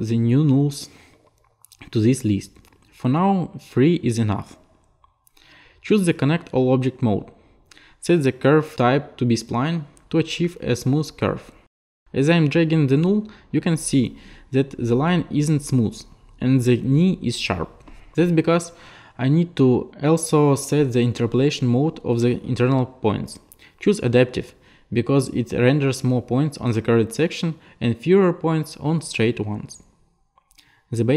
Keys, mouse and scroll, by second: 4.6 click, 5.7 click, 7.8 click, 8.7 click, 11.6 click, 13.4 click, 14.9 click, 17.6 click, 20.5 click, 21.1 click, 22.1 click, 24.0 click, 27.7 alt+click, 28.5 click.